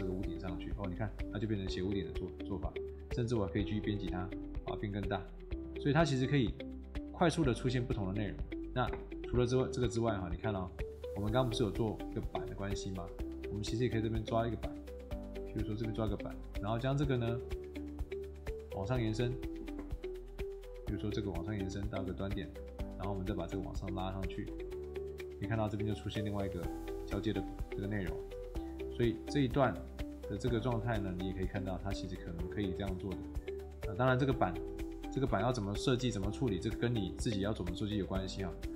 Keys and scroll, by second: 0.7 Escape, 4.3 Escape, 15.9 Escape, 25.4 Escape, 28.2 Escape, 30.4 Escape.